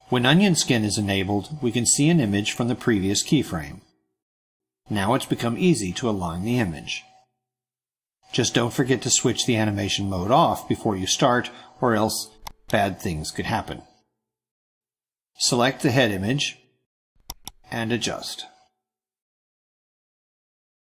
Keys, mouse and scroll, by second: 12.3 click, 20.3 ctrl+scroll up 2.